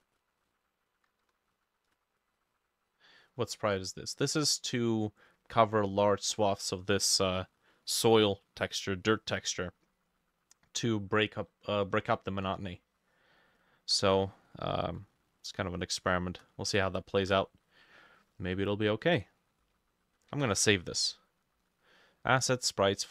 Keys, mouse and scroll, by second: 0.2 ctrl+c, 0.4 middle click, 0.4 ctrl+v, 1.3 BackSpace, 1.6 6, 1.9 Return, 14.8 ctrl+click, 15.3 shift+click, 15.9 shift+click, 17.0 shift+click, 20.2-22.4 ctrl+drag, 20.2 ctrl+middle click, 20.4 ctrl+s.